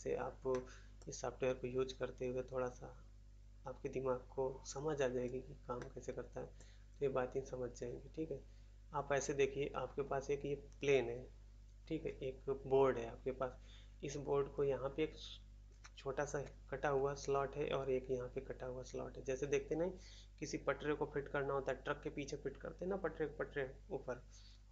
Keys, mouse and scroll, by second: 0.5 middle click, 0.9 middle click, 5.2-5.7 scroll down 1, 5.7 middle click, 6.5 middle click, 6.8 scroll down 1.